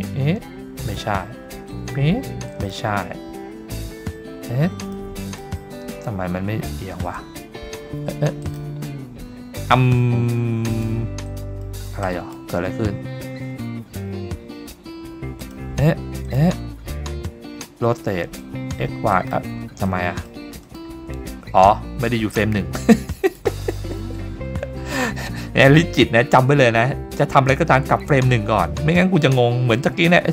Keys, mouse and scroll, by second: 1.7 click, 3.9-4.8 scroll up 2, 4.8 click, 5.3 click, 7.2-8.4 drag, 10.7 click, 11.3 click, 11.6 middle drag, 12.0 drag, 14.0-14.7 scroll up 3, 15.4 click, 16.3 click, 17.5-18.4 scroll up 2, 18.4 click, 19.9-20.6 middle drag, 20.7 click, 23.2 click, 28.9-29.2 scroll up 2, 29.3-29.8 shift+middle drag.